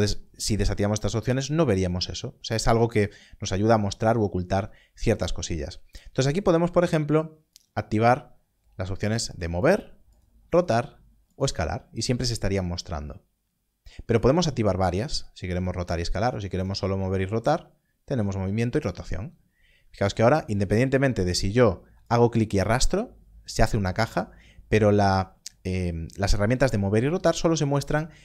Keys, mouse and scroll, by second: 7.5 click, 14.2 click, 20.1 click, 27.1 click.